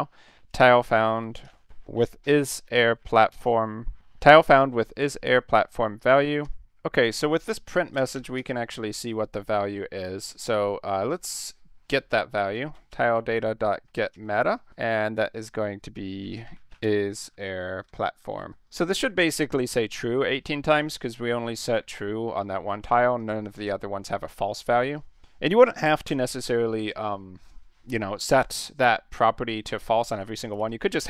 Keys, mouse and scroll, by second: 0.0-3.9 typing, 5.9 ;, 6.2 space, 6.5 BackSpace, 7.9 space, 8.1 5, 8.3 space, 12.1-18.9 typing, 23.2 click, 23.6 ctrl+s, 24.5 click, 26.1 ,, 30.5-31.0 typing.